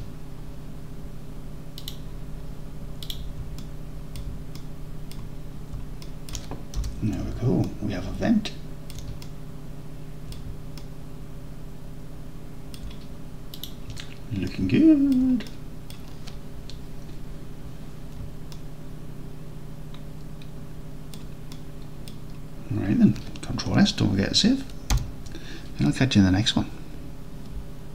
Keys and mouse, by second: 0.0 Tab, 1.9 middle click, 3.1 click, 3.6 alt+click, 4.6-5.1 alt+drag, 6.1 alt+click, 6.8 n, 7.7-8.3 alt+drag, 8.9 alt+drag, 9.3 alt+drag, 9.7 alt+click, 9.9 alt+middle drag, 10.8-12.8 alt+middle drag, 13.6 click, 14.5 alt+middle click, 14.9 alt+middle click, 15.5 middle drag, 15.8 middle click, 18.6-21.2 alt+middle drag, 21.6-22.1 middle drag, 25.0 ctrl+s.